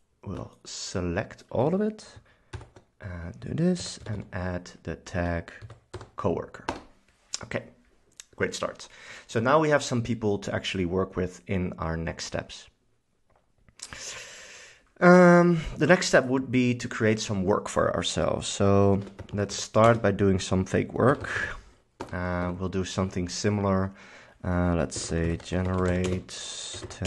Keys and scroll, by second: 2.7 super+k, 3.9 a, 4.3 d, 5.3 Return, 5.8 c, 6.1 o, 6.8 Return, 18.8-22.1 typing, 22.1 Return, 22.5 Tab, 24.8-27.0 typing.